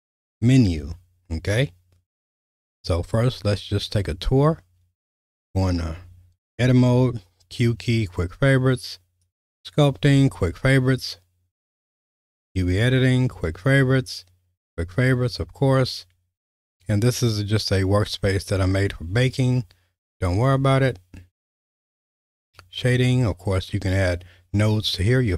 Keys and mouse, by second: 5.2 click, 6.8 q, 9.3 click, 10.0 q, 12.3 click, 13.1 q, 14.6 q, 17.7 click, 18.9 q, 20.6 q, 22.4 click.